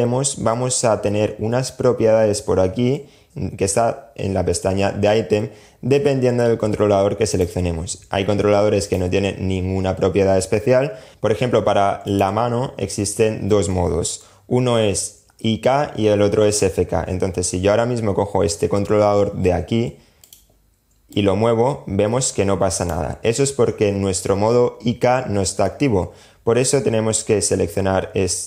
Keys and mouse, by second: 6.5 click, 8.0 click, 11.2 click, 19.4 click, 20.3-22.2 drag, 23.0 super+z, 27.8 click.